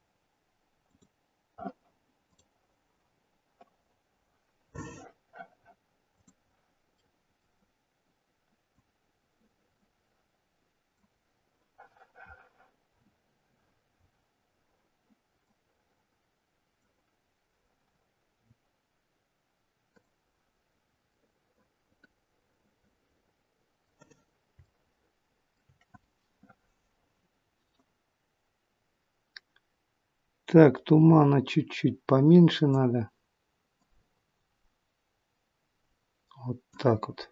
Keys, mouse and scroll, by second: 6.5 click, 7.1 middle click, 8.7 click, 13.2 scroll down 3, 15.4 click.